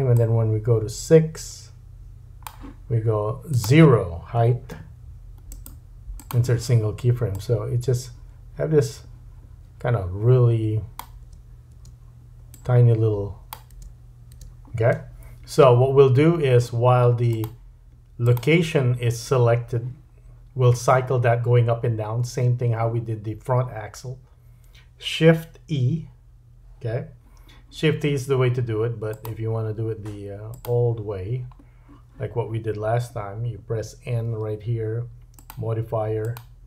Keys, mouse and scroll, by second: 0.2 click, 3.5 click, 5.5 right click, 7.4 click, 8.3 middle click, 11.2 space, 11.8 space, 12.5 click, 13.7 space, 14.4 space, 17.4-18.2 drag, 18.3-29.1 drag, 34.2 n, 35.4-36.2 drag.